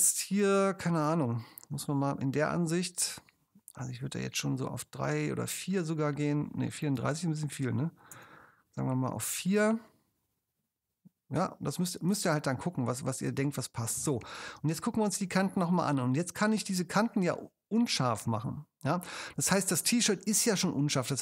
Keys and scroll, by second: 1.4 super+0, 4.3 3, 5.8 4, 7.0 BackSpace, 8.2 BackSpace, 8.9 4, 14.8 super+space.